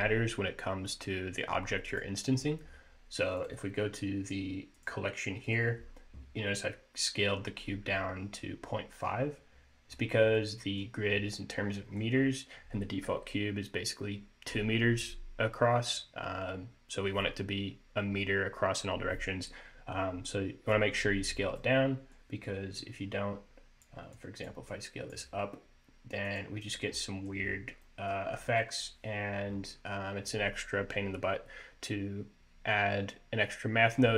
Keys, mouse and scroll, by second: 0.0-0.7 scroll up 4, 0.7-1.2 scroll down 1, 1.2 click, 2.6 click, 4.0 click, 4.7 click, 9.1-9.7 scroll up 2, 9.6 middle click, 10.3-10.6 scroll down 2, 10.6 middle click, 11.3-11.8 scroll up 3, 11.8-12.6 scroll down 2, 20.8 middle click, 21.4-22.2 scroll down 1, 22.2 click, 23.4 click, 23.9 click, 25.5 click, 26.2 middle click, 26.7-27.1 scroll up 2, 27.1 middle click, 27.6 scroll down 2, 27.8 middle click, 28.7 scroll up 2, 28.9 scroll down 1.